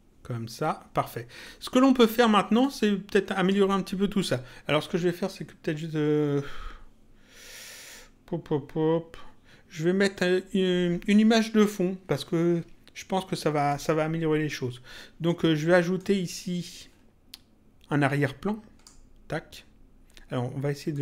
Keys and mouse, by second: 1.4 click, 2.5 click, 15.9 click, 20.9 click.